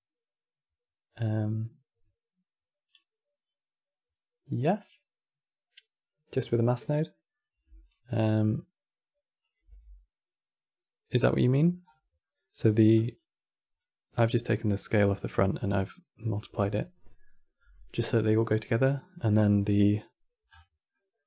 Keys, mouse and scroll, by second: 9.1 click, 10.0 g, 11.5-11.9 scroll up 9, 11.9-12.6 middle drag, 12.6 click, 13.5 click, 18.5-19.3 scroll down 9, 20.2 scroll down 8, 20.6 middle click.